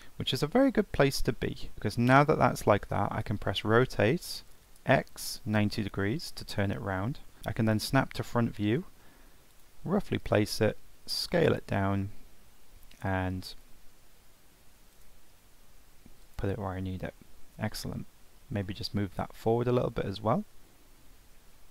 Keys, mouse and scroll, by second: 1.3-1.7 scroll up 7, 1.7 middle click, 16.7 Tab, 17.1-17.9 middle drag, 17.9-18.6 scroll up 4, 18.6-19.0 middle drag, 19.0 g.